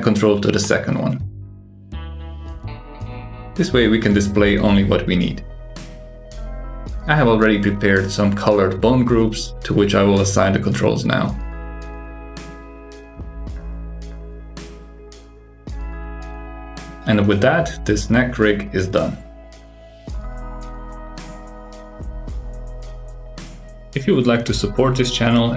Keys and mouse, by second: 1.4 click, 4.8 click, 6.4 click, 7.2 click, 7.9 shift+click, 8.9 click, 10.8 click, 11.2 middle click, 11.3 click, 11.5 alt+z, 12.0 shift+drag, 12.7 click, 13.4 click, 13.7 g, 15.4 click, 15.6 g, 16.2 r, 17.1-17.8 middle drag, 17.9 g, 19.1-20.1 middle drag, 20.2 click, 21.3-21.8 drag, 21.8 r, 23.5 click, 23.8 g, 25.3 click.